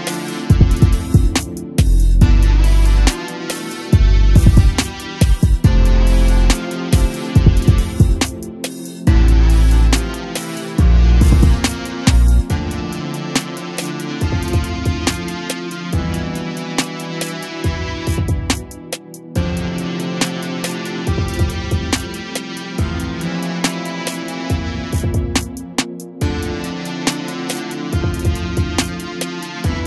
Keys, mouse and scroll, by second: 0.5 r, 2.6 r, 4.2 KP_7, 5.1 shift+d, 5.5 g, 9.9 a, 10.4 KP_0, 10.9 a, 11.1 a, 11.7-12.1 shift+middle drag, 12.1 click, 12.6 s, 13.5 a, 14.0 click, 14.4 s, 15.3 a, 15.7 click, 18.7-19.6 scroll up 3, 19.6 g, 20.9 2, 21.1 click, 21.2 click, 21.9 click, 22.4 g, 23.6 a, 23.9 Tab, 24.1 a, 24.3 a, 24.4-25.2 scroll down 1, 25.2-25.9 scroll up 1, 25.9 click, 26.6 Tab, 26.9 3, 27.4 click, 28.0 g, 29.2 g.